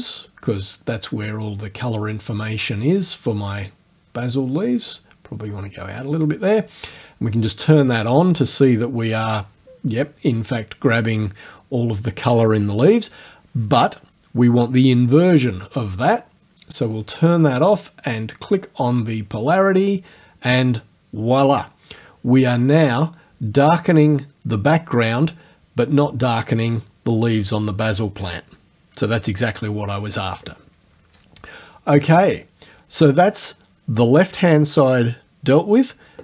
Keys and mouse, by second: 0.3-3.2 drag, 4.2 click, 5.5 click, 7.8 click, 17.0 click, 19.7 click, 32.1 click.